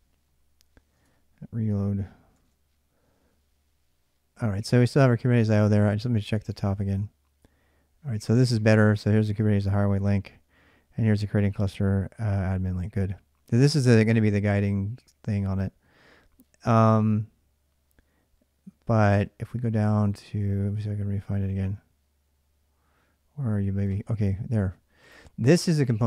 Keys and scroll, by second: 0.7 alt+Tab, 2.1 ctrl+r.